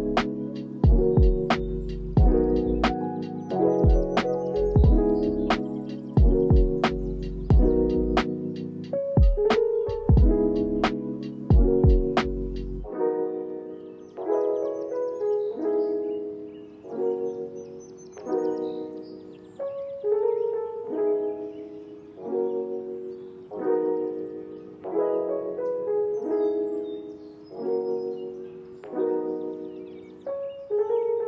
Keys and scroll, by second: 3.4 ctrl+s, 10.1 space, 12.5 space, 14.6 x, 15.4 ctrl+s, 17.8 space, 19.6 ctrl+s, 20.9 ctrl+c, 23.0 ctrl+v, 23.3 ctrl+s, 23.9 space, 28.4 ctrl+s.